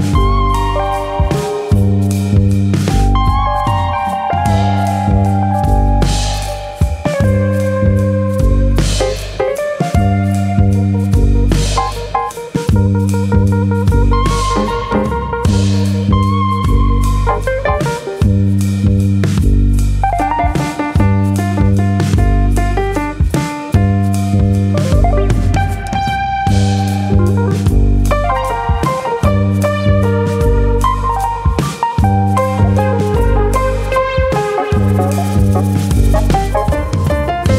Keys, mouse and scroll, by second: 0.4 click, 1.1 middle click, 1.4-1.8 scroll down 2, 1.6 Tab, 1.9 middle click, 2.2-2.8 scroll down 4, 2.5 middle click, 2.9 scroll up 1, 3.1 middle click, 4.4-4.8 scroll up 3, 4.9 shift+middle click, 5.2 middle click, 5.5 Tab, 5.8 middle click, 6.1 middle click, 6.9 shift+middle click, 6.9 click, 7.4 click, 8.2 middle click, 9.1 click, 9.6 click, 11.6 shift+e, 14.6 click, 16.9 click, 20.0 scroll up 2, 20.2 middle click, 20.6 middle click, 21.3 click, 22.5 click, 23.1 click, 24.2 middle click, 25.1 click, 25.8 click, 27.7 click, 28.7 middle click, 29.2 middle click, 30.1 middle click, 30.2 click, 30.5 middle click, 31.0 middle click, 31.4 s, 33.9 click, 34.1 middle click, 34.7 click, 34.9 s, 35.6 click, 36.1 click, 36.5 s, 37.3 click.